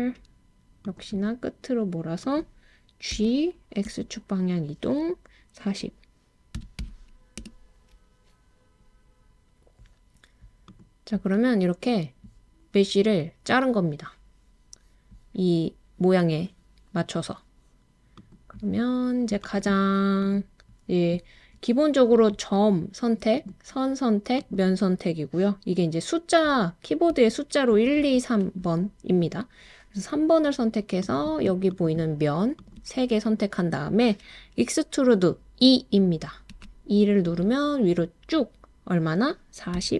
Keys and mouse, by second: 2.2 click, 3.1 g, 3.9 x, 6.6 4, 6.8 0, 7.4 Return, 10.7 click, 23.4 click, 24.5 click, 27.7 2, 28.0 3, 31.0 click, 36.5 e, 39.7 4.